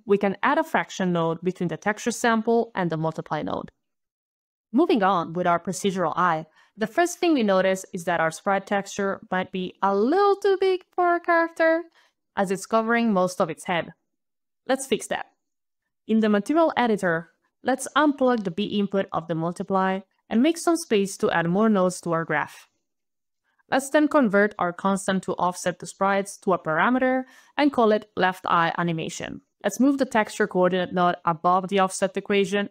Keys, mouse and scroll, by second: 0.0-0.3 typing, 0.5 click, 1.2 click, 3.0 click, 4.1 click, 5.5 click, 6.1 click, 6.5-7.9 click, 7.0 click, 9.6 right click, 10.1 right click, 10.5 right click, 10.7 right click, 11.4 right click, 11.5 right click, 11.8 right click, 12.3 right click, 12.7 right click, 13.4 right click, 13.7 right click, 16.4 right click, 17.4 scroll down 2, 18.1 scroll down 2, 18.9 alt+click, 19.3 click, 19.7-20.3 scroll down 1, 20.4 click, 21.9 click, 23.7 click, 24.0 click, 24.4 click, 24.8 click, 25.4 click, 26.9 click, 27.3-29.6 typing, 29.1 shift+click.